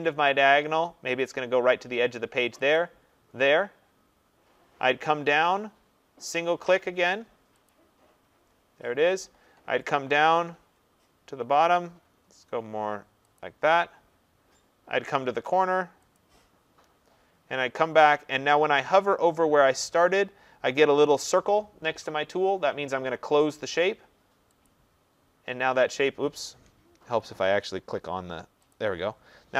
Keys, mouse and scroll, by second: 2.7 click, 7.7 click, 13.4 click, 16.1 click, 24.6 click, 27.0 ctrl+z, 28.7 click.